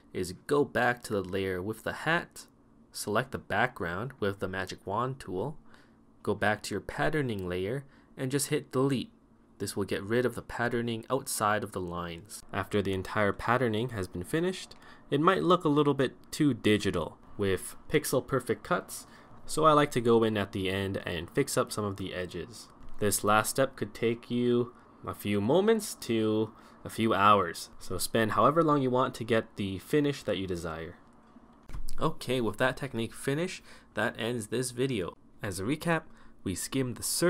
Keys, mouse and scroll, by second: 12.4 ], 13.4 ], 16.7 ], 24.6 ctrl++, 25.5 ctrl++, 25.9 ctrl+-.